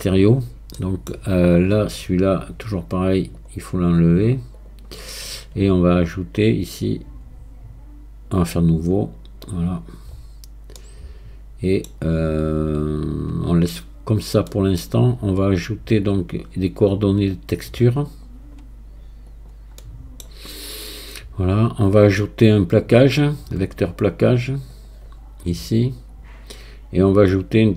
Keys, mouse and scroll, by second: 0.8-3.4 middle drag, 3.4-5.3 drag, 5.3-6.7 scroll down 1, 6.7-9.7 drag, 9.7-10.8 scroll down 5, 10.8-13.8 middle drag, 14.1-14.5 scroll down 1, 14.5-16.1 middle drag, 16.1-19.1 drag, 19.8 middle click, 20.6-25.7 drag, 27.5-27.7 drag.